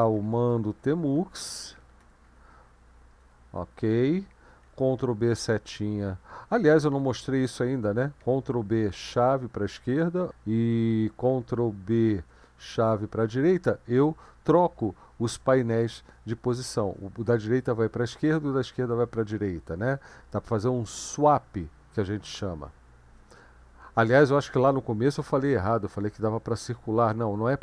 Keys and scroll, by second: 0.0-2.8 typing, 3.2 Return, 4.8 ctrl+b, 5.3 Left, 8.2 ctrl+b, 8.9 shift+], 12.1 ctrl+b, 12.7 shift+[.